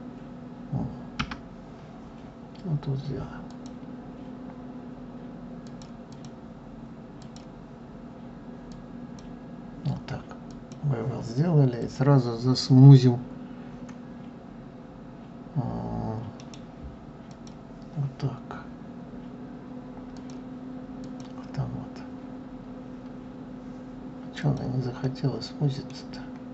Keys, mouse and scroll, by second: 3.3-5.5 drag, 5.9 click, 7.0-10.0 drag, 10.3 click, 11.5 click, 16.2 right click, 19.9 click, 20.8 click, 24.2 click, 24.8-25.9 middle drag, 25.9-26.5 scroll down 1.